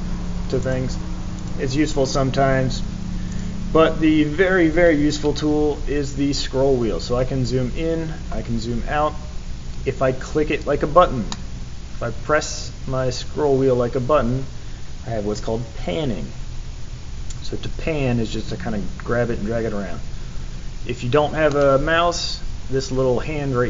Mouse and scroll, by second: 0.6 right click, 1.3 right click, 3.3 right click, 6.3 scroll up 2, 6.9 scroll up 2, 8.0 scroll down 2, 8.5 scroll down 2, 11.3-21.4 middle drag.